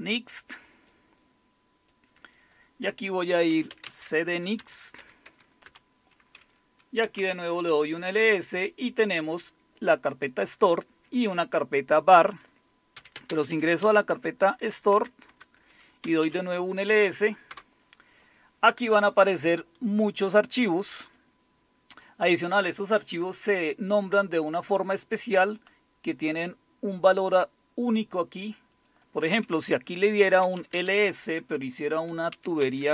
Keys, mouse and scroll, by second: 0.8 click, 1.2 click, 2.3 click, 3.5-5.5 typing, 5.6 Return, 6.8-8.2 typing, 12.9-18.0 typing, 21.4-22.3 scroll down 1, 22.3 scroll down 1, 25.0-28.2 drag, 28.7 click, 29.0 click, 30.3-31.1 typing, 32.3-32.9 typing.